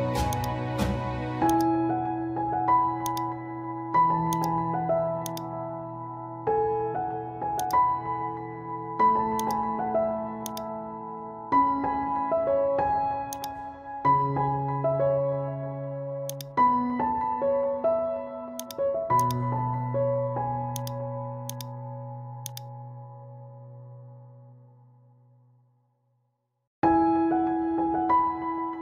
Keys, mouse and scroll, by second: 2.7 ctrl+t, 3.1-11.8 drag, 11.8 Return, 13.3 click, 16.3 click, 18.6-20.7 drag, 24.3 scroll down 1, 26.8 ctrl+e, 28.2 ctrl+z.